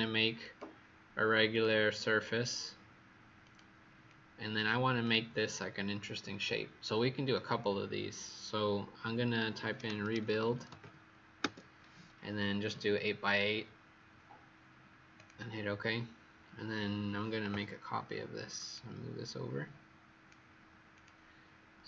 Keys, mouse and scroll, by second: 4.0 click, 9.7-10.7 typing, 11.3 Return, 15.1 click, 20.9 click.